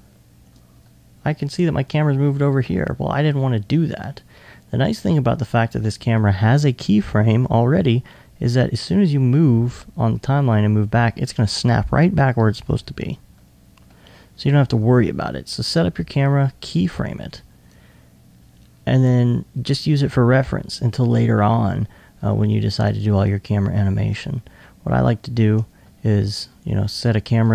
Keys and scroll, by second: 12.3 2.